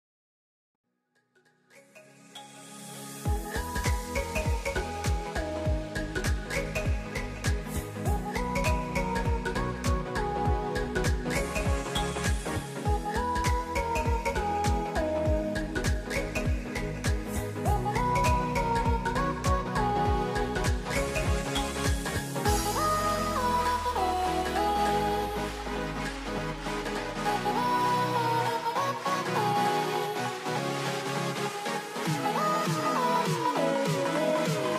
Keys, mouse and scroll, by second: 1.7 z, 3.6 s, 5.4 c, 7.4 z, 11.2-14.9 middle drag, 14.9-16.8 scroll up 2, 16.8-18.8 middle drag, 18.8 click, 20.6 c, 22.5-24.5 middle drag, 24.5 s, 26.5 c, 28.5 s, 30.4-34.6 middle drag, 34.6-34.7 scroll up 1.